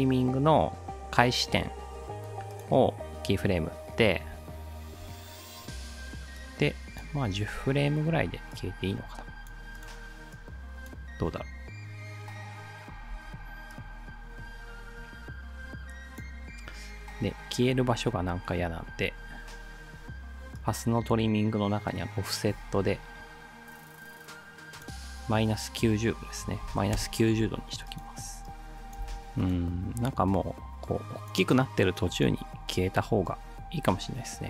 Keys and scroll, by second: 11.2 space, 13.2 space, 26.2-27.2 typing, 29.0 space, 29.3 space.